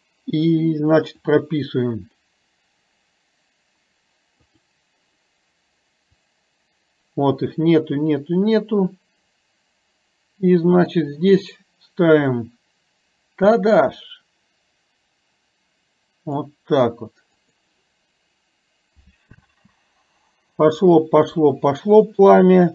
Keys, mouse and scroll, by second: 1.3 click, 6.3-11.1 drag, 12.3-16.6 drag, 17.6 click, 19.4 space.